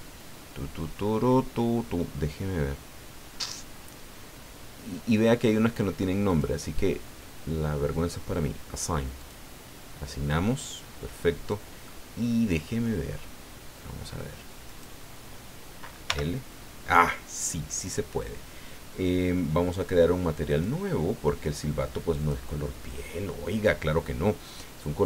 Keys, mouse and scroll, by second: 0.1 scroll down 2, 1.1-1.9 scroll down 4, 3.0-3.7 scroll down 2, 4.9-5.3 scroll down 4, 6.3 click, 9.2 click, 10.8-11.3 scroll down 2, 11.8-12.9 middle drag, 14.6 click, 16.0 l, 17.1 scroll down 2, 20.5 click, 22.2 click, 23.5-25.0 scroll down 8.